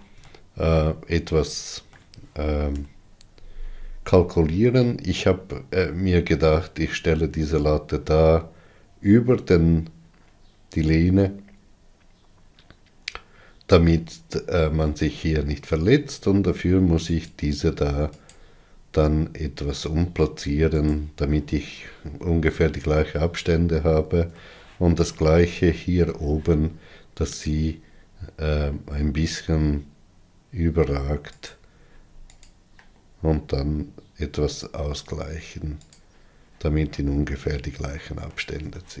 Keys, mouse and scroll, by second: 3.4 KP_3, 17.9 click, 19.0 click, 21.4 g, 25.1-28.1 shift+middle drag, 28.1 click, 29.4 g, 33.1 click, 33.5 g, 37.6-39.0 middle drag.